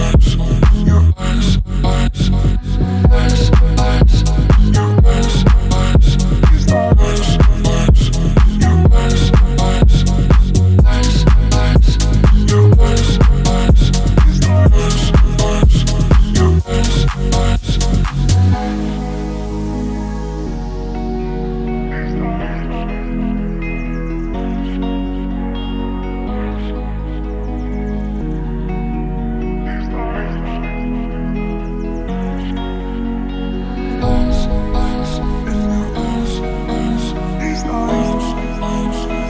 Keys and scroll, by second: 1.3 Left, 17.2 space, 29.5 typing, 32.1 Down, 37.4 ctrl+t.